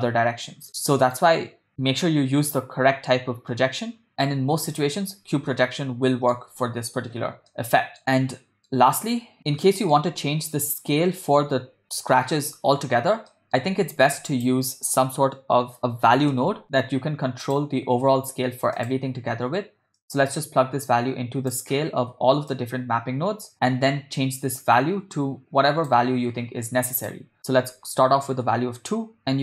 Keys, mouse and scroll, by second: 0.7-1.4 middle drag, 1.7 Tab, 2.4 u, 5.9 middle click, 7.2 ctrl+Tab, 7.7-8.0 ctrl+middle drag, 8.3 middle click, 9.7 shift+middle click, 10.3-10.6 ctrl+middle drag, 13.3 middle click, 13.8 shift+a, 20.0-21.8 drag, 22.5-23.5 drag, 24.4-26.0 drag, 26.9-28.4 drag.